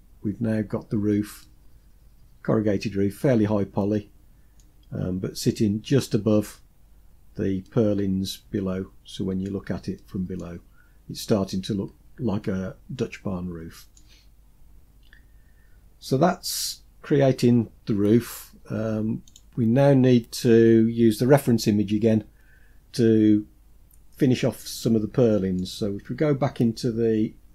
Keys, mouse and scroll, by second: 0.7-3.9 middle drag, 4.2-5.1 scroll down 2, 5.1-6.8 scroll up 3, 7.0-8.8 middle drag, 9.3-9.7 middle drag, 11.2-11.7 scroll down 2, 11.7-13.3 middle drag, 18.6 click, 23.9 middle click, 27.4 click.